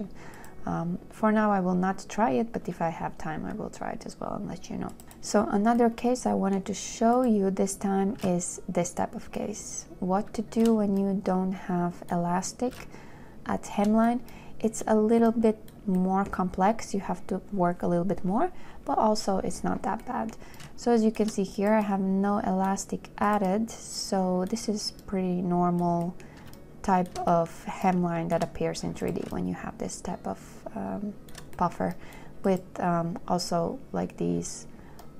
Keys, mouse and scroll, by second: 26.9 shift+click, 29.6 shift+click.